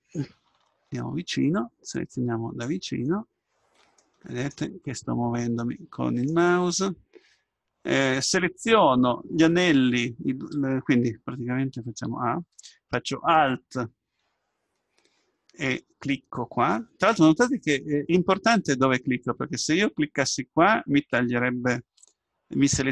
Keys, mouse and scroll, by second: 0.7-7.6 middle drag, 12.1 a.